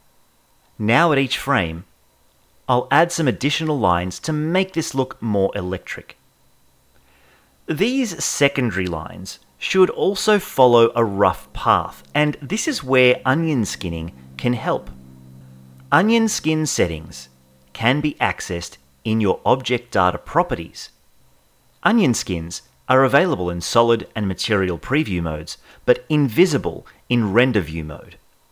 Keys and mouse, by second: 0.4 click, 1.4 Right, 1.8 click, 3.2 click, 3.8 Right, 4.2 click, 5.0 ], 5.1 ], 5.2 ], 5.7 click, 6.8 Right, 7.4 click, 8.4 click, 9.5 Right, 10.4 click, 11.2 click, 12.7 click, 13.1 Left, 13.3 Left, 13.5 Right, 13.6 Right, 13.9 Right, 16.5-19.0 drag, 19.1-20.3 drag, 22.2 click, 23.8 click, 25.7 click, 28.3 click.